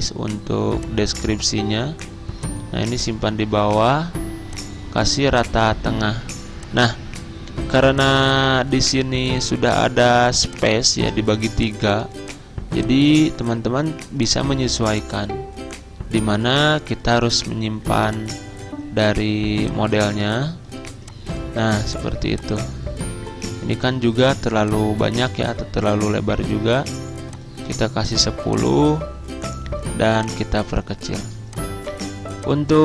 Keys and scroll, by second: 6.3 z.